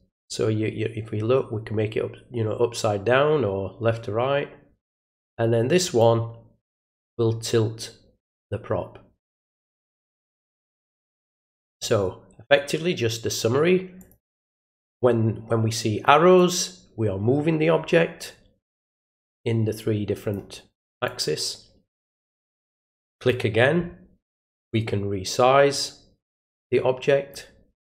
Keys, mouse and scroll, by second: 6.0-11.7 drag, 14.0 click, 16.3-18.8 drag, 19.4-20.3 drag, 21.0-22.5 drag, 23.1 click, 24.7-27.3 drag.